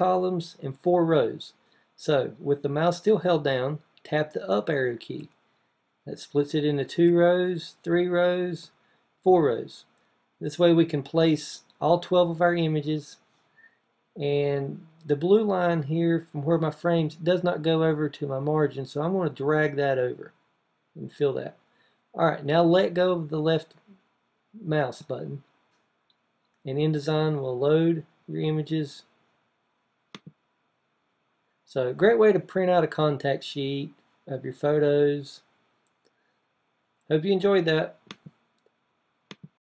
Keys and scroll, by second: 5.0 Up, 6.8 Up, 8.4 Up.